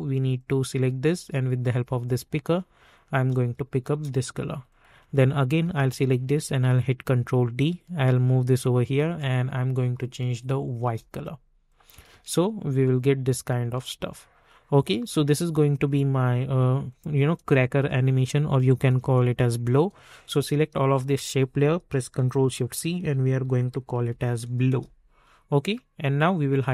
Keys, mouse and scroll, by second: 0.3 click, 3.9 Return, 4.6 click, 6.2 ctrl+d, 7.4-10.8 drag, 10.8 Return, 11.6 click, 12.1 space, 15.8 click, 22.4 ctrl+shift+c, 23.2-24.4 typing, 24.6 Return, 26.6-26.7 drag.